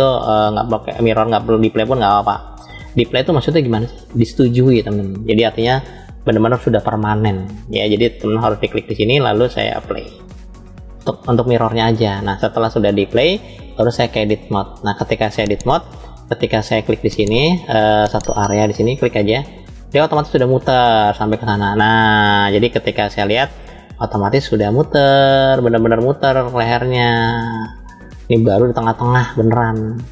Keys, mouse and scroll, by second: 0.0-0.9 scroll down 2, 2.0 scroll up 1, 8.7-10.5 drag, 13.9-14.8 drag, 15.3-16.1 scroll up 5, 16.5 click, 16.9 middle click, 19.3 alt+click, 20.0-22.5 middle drag, 23.6 click, 24.9-28.8 middle drag, 29.4-30.1 middle drag.